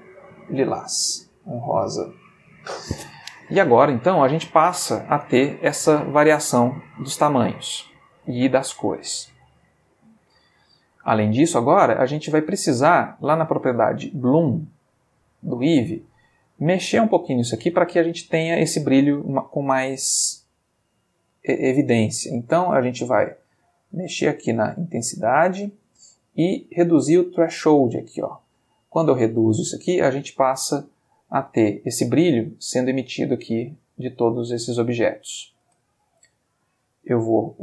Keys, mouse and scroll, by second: 1.8 click, 3.8 space, 5.1 space, 5.7-7.4 ctrl+middle drag, 12.5-13.7 shift+middle drag, 15.7 click, 22.3-25.7 drag, 26.1-29.9 drag, 31.4 space, 35.7 space, 36.3 click.